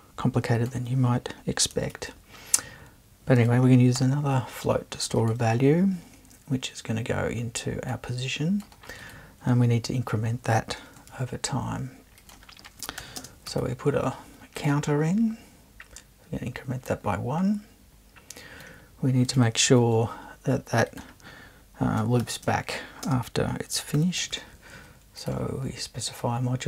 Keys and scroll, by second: 1.9 super+i, 4.0 f, 11.1 super+1, 13.0 shift+=, 13.2 shift+space, 13.5 1, 19.8 super+1, 22.2-24.7 typing.